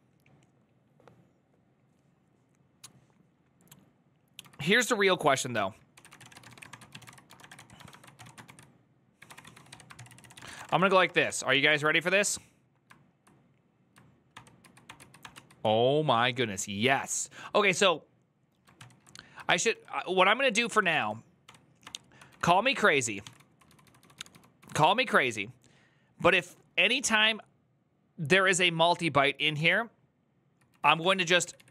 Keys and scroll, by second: 5.9-8.5 typing.